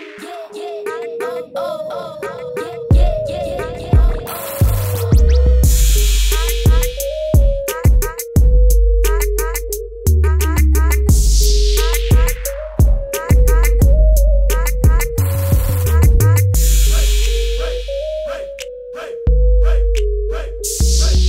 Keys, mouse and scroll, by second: 0.2 click, 6.6 ctrl+t, 8.4 alt+click, 10.2 KP_Enter, 13.1 click, 15.6 click, 16.4 ctrl+z, 17.9 click.